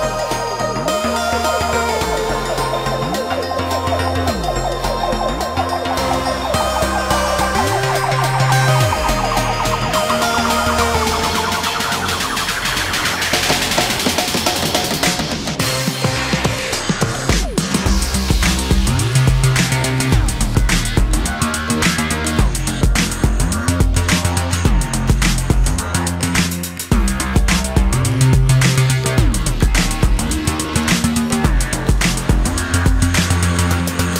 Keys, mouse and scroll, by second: 1.3 space, 2.6 m, 17.3 shift+click, 18.3 s, 21.2 ctrl+click, 21.5 space, 22.7 Delete, 30.4 ctrl+z.